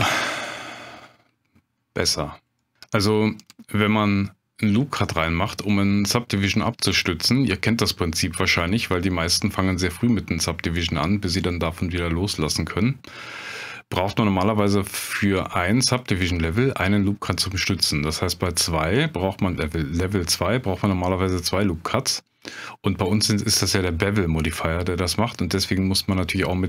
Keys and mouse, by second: 0.2 Tab, 2.6 click, 3.5 click, 8.6-9.7 drag, 11.5 middle drag, 23.1 click.